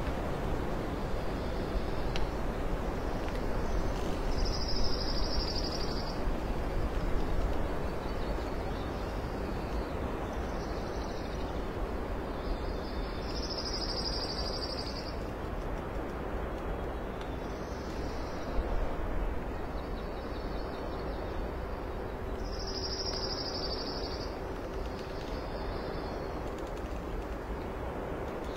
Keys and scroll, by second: 0.4 space, 2.1 alt+space, 3.4 space, 6.1 space, 7.1 alt+space, 7.8 ctrl+s, 12.3-14.4 typing, 15.3 ctrl+alt+space, 16.6 alt+space, 17.8 space, 20.5 space, 21.5 space, 23.3 ctrl+z, 24.0 space, 26.8 alt+space, 27.5 space, 28.2 alt+space.